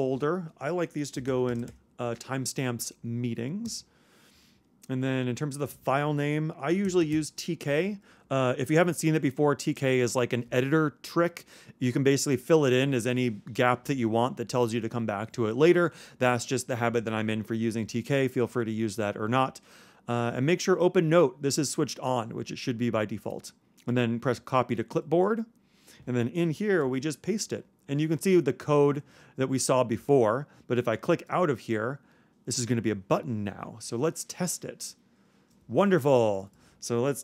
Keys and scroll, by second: 6.4-7.6 typing, 26.8 super+v.